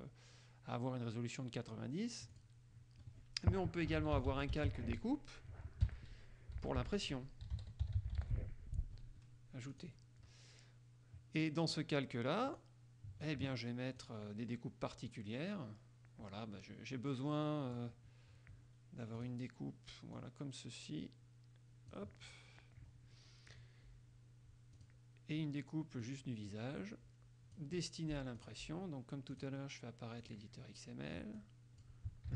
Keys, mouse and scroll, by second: 2.5 click, 3.8-5.2 typing, 6.7-8.8 typing, 9.9 click, 11.5 click, 12.7 click, 14.2 click, 15.3-18.1 drag, 19.3 click, 20.3-22.3 drag, 24.9 click, 26.2-27.9 drag, 28.5 click, 29.5 click, 30.4 click, 31.5 click.